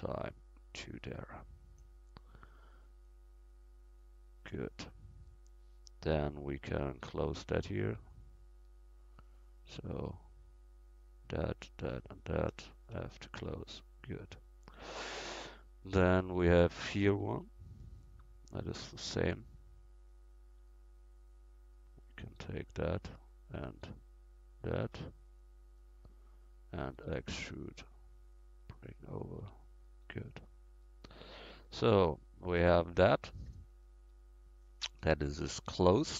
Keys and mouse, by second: 3.1-6.8 drag, 6.8 middle click, 8.1-12.2 drag, 9.4-12.6 right drag, 13.0 f, 13.4 Tab, 17.1 Tab, 20.7 click, 27.1 e, 29.4 Tab.